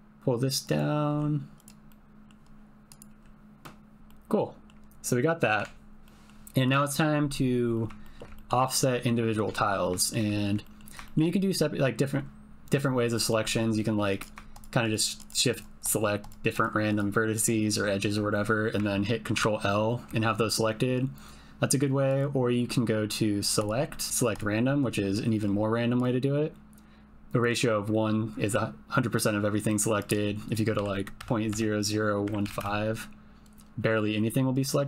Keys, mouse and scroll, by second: 0.6 click, 1.1 g, 1.5 click, 1.9 middle click, 2.9 click, 3.1 g, 4.0 g, 4.1 middle click, 5.6 Tab, 6.0 middle click, 6.6 click, 7.7 middle click, 8.0 shift+middle click, 8.3 ctrl+middle click, 8.4 ctrl+click, 8.6 click, 9.5 Tab, 10.0 shift+middle click, 10.3 ctrl+middle click, 10.6 middle click, 11.0 middle click, 13.2 middle click, 14.1 click, 14.5 shift+click, 14.9 shift+click, 15.2 shift+click, 15.8 shift+click, 16.2 shift+click, 16.8 shift+click, 17.3 shift+click, 19.3 ctrl+l, 26.1-27.5 drag, 31.5 KP_0.